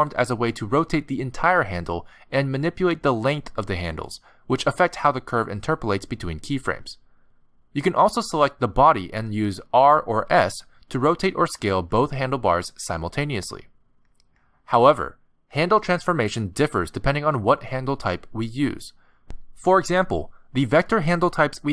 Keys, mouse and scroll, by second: 10.0 click, 10.5 r, 12.1 s, 17.9 click.